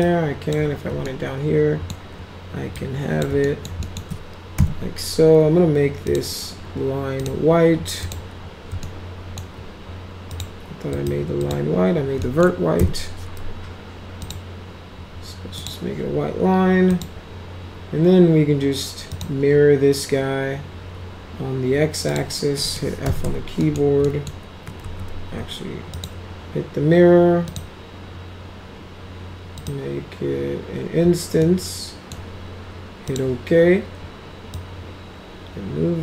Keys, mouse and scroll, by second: 0.0 click, 1.1 alt+middle click, 2.8 click, 3.5 alt+middle click, 3.8 alt+middle click, 4.6 m, 6.1 click, 7.2 click, 8.0 click, 8.8-9.4 alt+middle drag, 10.3 click, 11.0 click, 11.4 click, 12.2 alt+middle click, 12.8 m, 14.2 click, 15.6 click, 16.9 click, 19.1 click, 22.1 click, 22.6 middle click, 22.8-23.8 typing, 23.6 middle click, 24.1 middle click, 24.8 ctrl+z, 26.0 click, 27.5 click, 29.6 click, 31.4-32.1 middle drag, 33.1 click, 34.5-36.0 drag.